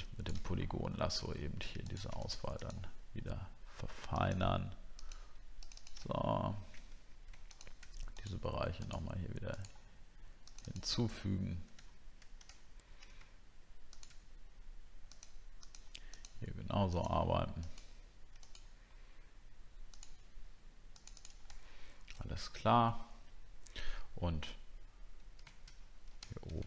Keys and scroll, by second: 21.6 alt+scroll down 1, 26.2 alt+scroll down 1.